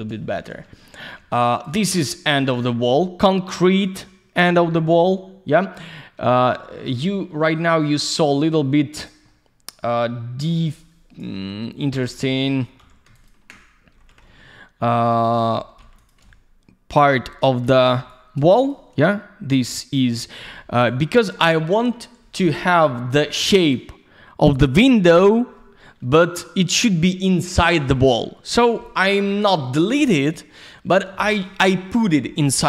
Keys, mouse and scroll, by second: 0.3 alt+shift+q, 1.5 click, 1.6 click, 1.8 alt+middle click, 2.7 alt+middle click, 4.6 alt+shift+q, 5.0 alt+middle click, 7.0 middle click, 8.4 alt+z, 8.6 click, 9.3 middle click, 10.6 alt+z, 10.7 click, 11.3 middle click, 12.1 alt+middle click, 13.0 q, 13.1 ctrl+click, 13.2 ctrl+click, 14.2 alt+middle click, 15.6 middle click, 15.7 middle click, 16.0 click, 16.1 double click, 16.3 alt+middle click, 17.2 middle click, 18.0 alt+z, 18.1 click, 18.6 click, 18.7 click, 19.0 alt+middle click, 21.4 middle click, 22.5 F3, 23.6 click, 23.7 click, 26.4 alt+middle click.